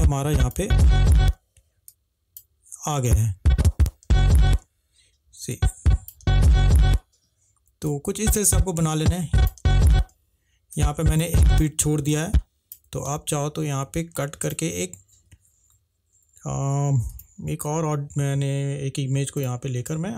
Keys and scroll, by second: 1.3 space, 4.2 space, 6.3 space, 9.7 space, 11.4 space, 13.8 c, 17.9 Delete.